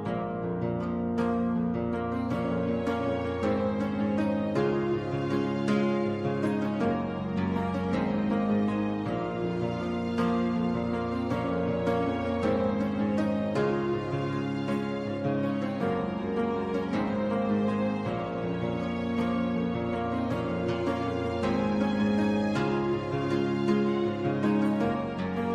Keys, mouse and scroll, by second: 2.3 d, 4.4-5.3 drag, 7.1 ctrl+d, 9.2 d, 10.9-11.5 drag, 12.7 ctrl+d, 13.2-16.4 right drag, 19.8 click, 22.0 ctrl+c, 22.6 ctrl+v, 23.6-24.4 drag.